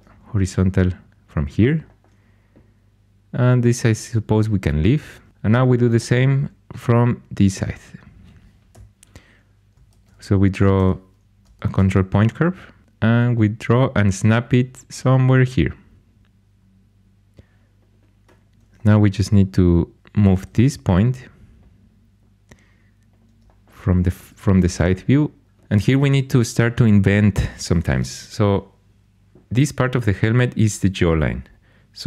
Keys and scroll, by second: 8.7 1, 9.8 ctrl+super+c, 10.7 ⟲, 11.6 ctrl+super+c, 19.9-20.9 typing.